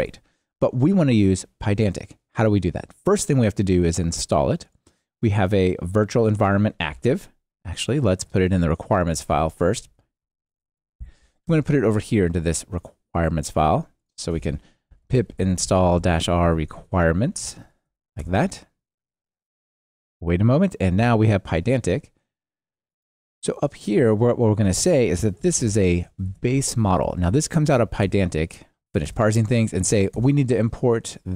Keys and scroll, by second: 28.0 alt+Return, 29.1 alt+Return.